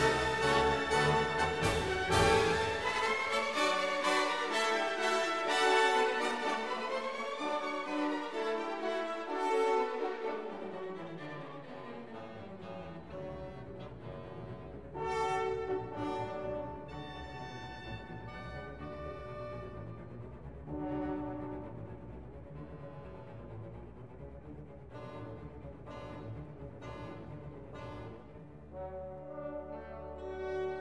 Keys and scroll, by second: 0.5 alt+q, 11.1 2, 11.5 Return.